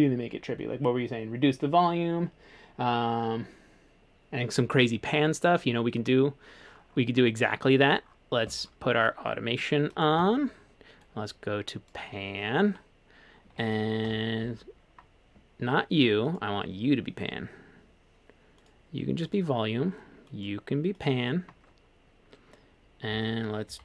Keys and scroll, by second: 10.2 a, 14.1 F3.